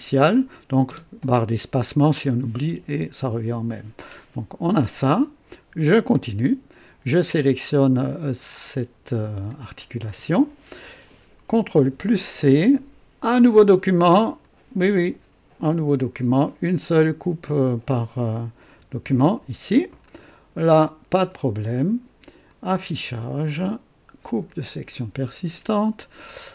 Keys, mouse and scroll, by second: 0.8 space, 0.9 space, 5.8 click, 9.0 click, 11.8 ctrl+c, 14.4 click, 18.9 ctrl+v, 20.0-21.3 right drag, 22.4 click, 24.4 click.